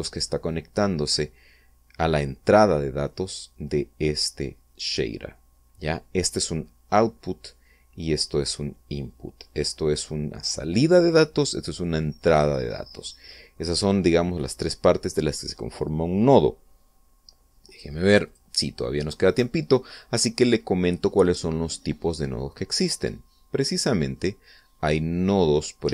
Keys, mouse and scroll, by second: 18.3 click, 18.9 click, 23.7-25.0 middle drag, 25.1-25.9 scroll down 2.